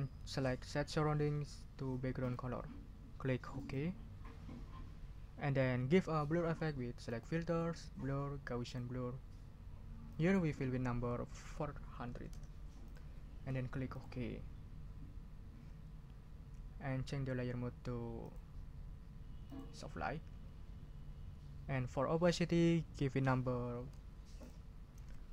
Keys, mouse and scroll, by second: 3.5 click, 7.0 click, 8.6 click, 10.1 click, 11.4 4, 12.1 0, 12.8 click, 13.9 click, 19.5 click, 24.4 ctrl+click, 25.0 ctrl+a.